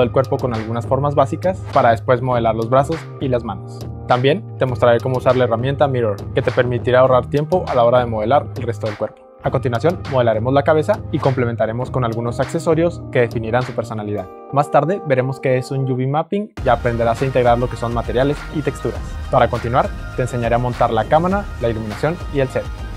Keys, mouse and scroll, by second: 2.2-3.7 typing, 5.0-9.3 middle drag, 10.0 Tab, 10.0 Tab, 10.0 middle click, 10.2 r, 10.4 r, 10.6 g, 11.0 Tab, 11.6 r, 20.0 r, 22.2 right click.